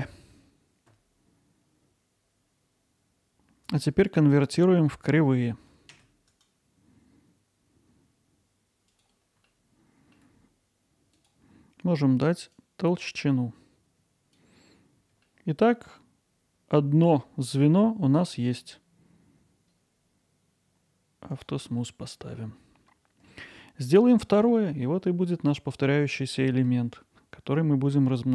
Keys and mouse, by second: 3.8-5.0 right drag, 6.4-9.0 right drag, 9.5 alt+middle click, 12.6-14.4 drag, 15.3-17.1 alt+middle drag, 18.3-21.4 right drag, 21.8-22.1 middle drag, 22.4 alt+middle click, 23.6-24.0 middle drag, 25.9-26.3 middle drag.